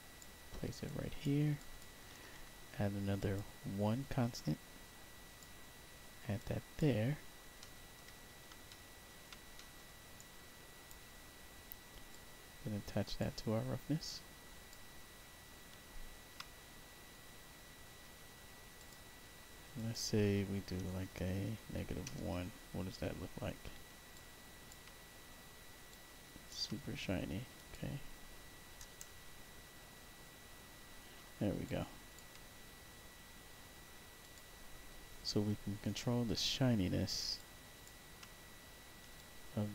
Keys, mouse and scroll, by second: 0.8 click, 1.5 click, 2.4 1, 3.1 click, 4.3-5.3 drag, 6.3 click, 7.1 scroll up 1, 7.5 middle click, 8.6 alt+middle click, 9.0-10.1 alt+scroll down 2, 9.5 middle click, 10.1 click, 10.1 right click, 12.0-13.1 drag, 14.0 click, 15.1 middle click, 16.9 middle click, 17.5 middle click, 18.7 click, 19.7 click, 24.0 alt+click, 24.9-25.4 scroll up 2, 25.8 alt+click, 27.5 click, 31.6 alt+click, 32.4-33.7 middle drag, 34.1 click, 37.3 alt+click, 38.4 middle click, 39.1 alt+click.